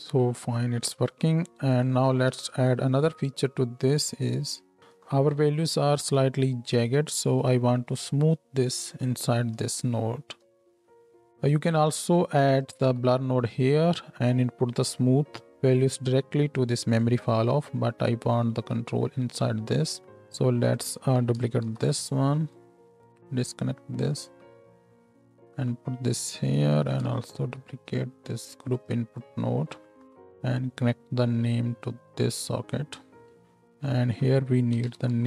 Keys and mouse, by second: 0.7 space, 1.9-10.4 drag, 2.0 Tab, 10.4-12.7 middle drag, 12.7-16.8 drag, 15.0 Tab, 16.8 middle click, 17.0-33.8 drag, 18.5 Tab, 21.6 ctrl+shift+d, 24.9-27.0 middle drag, 24.9-27.0 right drag, 27.5 shift+d, 29.2-33.2 middle drag, 29.2-33.2 right drag, 30.0 ctrl+h, 33.4 ctrl+h, 33.8-35.2 middle drag.